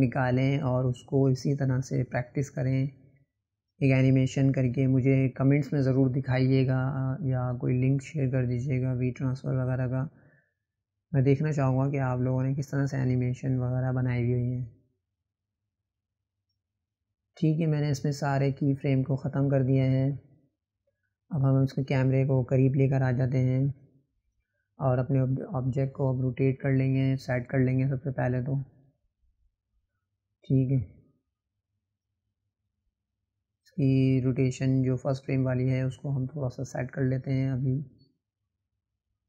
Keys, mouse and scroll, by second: 3.0-4.9 drag, 7.4 click, 17.2 click, 18.3 click, 19.3 scroll up 4, 19.9-21.8 middle drag, 21.8-22.7 scroll down 1, 22.7 click, 25.1 click, 27.5-30.4 right drag, 30.4 click, 31.6-33.1 drag, 35.9 click, 38.3 click.